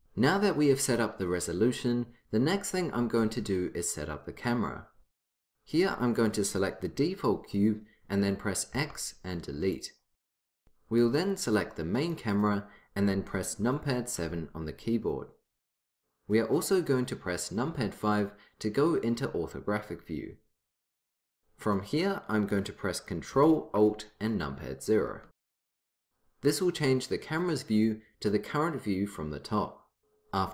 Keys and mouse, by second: 8.8 x, 12.0-14.2 drag, 14.2 KP_7, 17.7 KP_5, 24.9 ctrl+alt+KP_0.